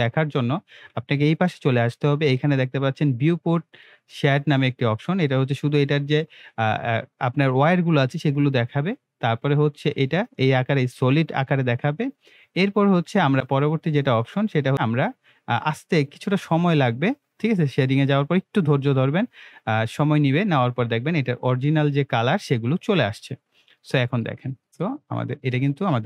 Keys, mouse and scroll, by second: 25.5 middle click.